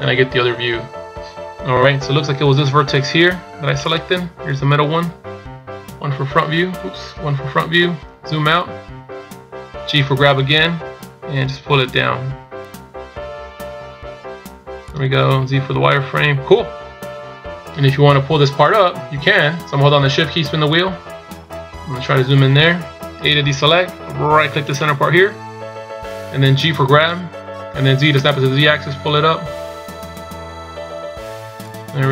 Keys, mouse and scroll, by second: 1.5-1.8 scroll up 2, 3.9 right click, 6.0 KP_1, 7.2 KP_1, 8.0-9.2 scroll down 4, 9.2 scroll up 2, 10.7 g, 20.5-21.6 shift+scroll down 5, 21.6-22.5 scroll up 3, 23.5 a, 24.8 right click, 26.8 g.